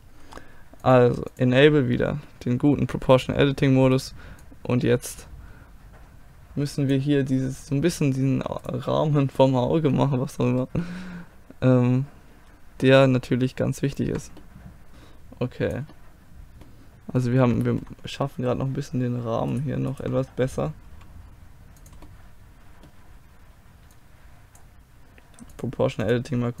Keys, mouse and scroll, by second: 4.0 middle click, 4.4-5.9 right drag, 4.5-5.8 middle drag, 9.7 right click, 10.6-14.9 middle drag, 15.9-18.5 middle drag, 19.5-21.8 right drag, 20.9 g, 21.8 click, 24.0-26.6 drag.